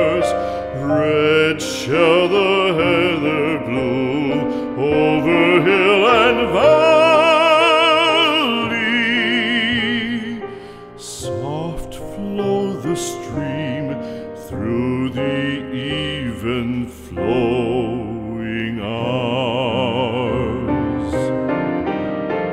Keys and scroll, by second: 3.9 alt+Delete, 9.3 space, 12.3 space, 20.9 b.